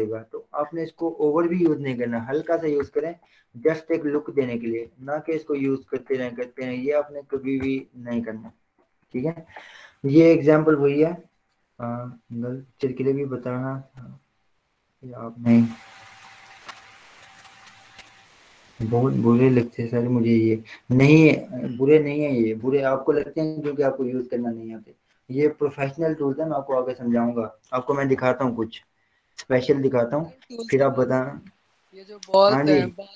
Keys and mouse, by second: 2.2 ctrl+w, 2.8 Up, 3.1 Return, 6.6 ctrl+w, 7.9 Return, 10.2 click, 29.3 click.